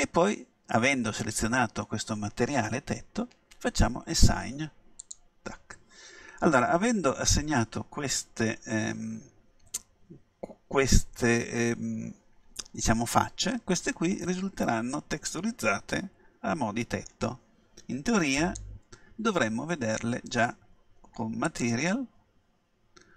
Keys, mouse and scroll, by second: 5.0-6.8 drag, 7.3-9.3 middle drag, 10.9-12.3 middle drag, 13.7 middle click, 18.4-20.3 drag.